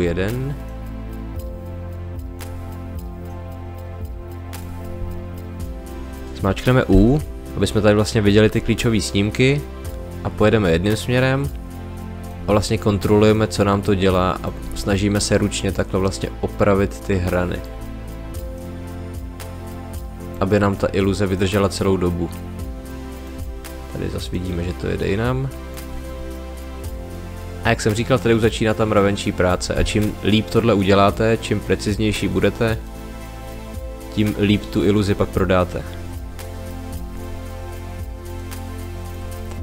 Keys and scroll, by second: 6.9 u.